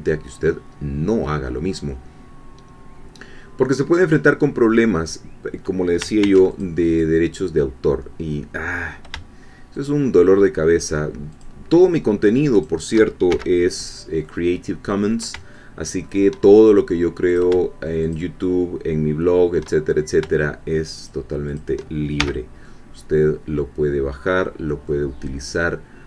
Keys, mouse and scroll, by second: 6.2 ctrl+r, 6.5 ctrl+click, 6.9 ctrl+click, 9.7 shift+click, 11.4-12.8 shift+drag, 13.3 shift+f, 14.2-15.2 middle drag, 15.6 shift+middle click, 17.4 shift+click, 21.1 shift+click, 22.2 shift+f, 22.6-25.0 shift+middle drag.